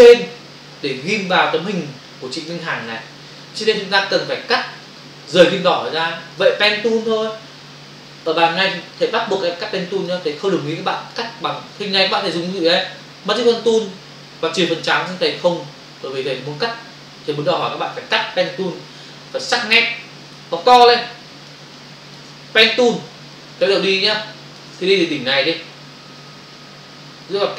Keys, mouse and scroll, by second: 0.9 click, 1.1 click, 6.3 click, 6.9 f, 8.4 ctrl+space, 10.4 space, 11.5 click, 11.7 space, 20.5 space, 20.7 ctrl+click, 21.7 click, 22.7-23.2 typing, 24.1 ctrl+click, 27.2 click.